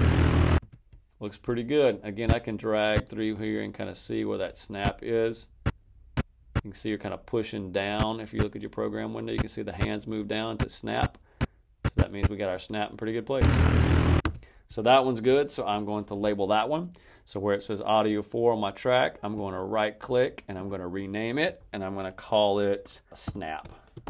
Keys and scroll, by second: 0.5 space, 13.3 space, 23.1-24.0 typing.